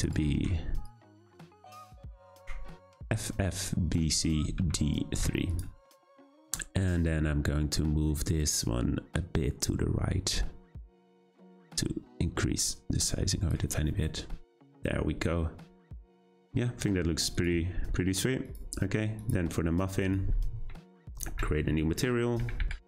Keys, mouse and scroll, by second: 7.9-10.6 drag, 17.4 click, 18.5 click, 19.2-22.8 drag.